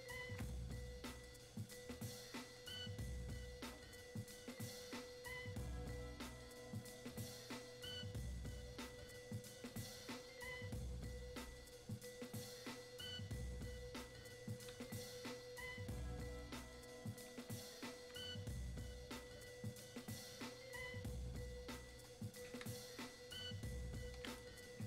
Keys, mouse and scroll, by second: 14.8-16.0 drag, 16.0-18.6 ctrl+drag, 18.6-24.5 ctrl+drag.